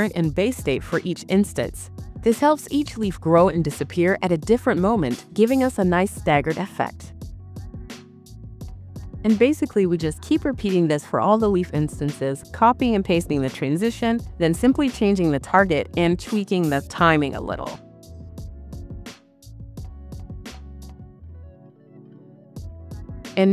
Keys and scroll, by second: 17.9 BackSpace, 18.3 4, 19.0 Return.